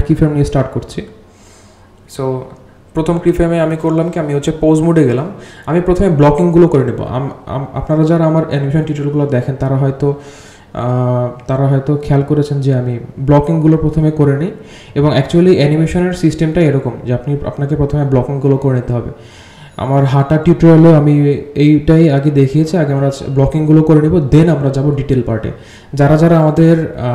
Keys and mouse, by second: 3.1 g, 4.6 g, 5.9 click, 6.4 g, 10.4 g, 14.8 g, 16.8 click, 17.4 click, 18.0 h, 19.0 alt+h, 19.8 click, 20.3 g, 20.6 middle drag, 21.1 click, 21.5 g, 26.3-27.1 drag.